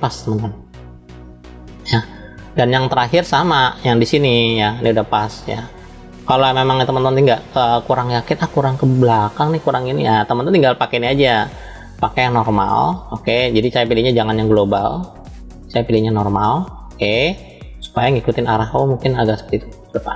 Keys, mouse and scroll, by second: 2.7 shift+middle click, 7.7-8.9 middle drag, 9.5 middle click, 11.3-13.0 drag, 13.9-16.2 drag, 16.5-17.7 drag, 18.4 click, 18.5-20.1 drag.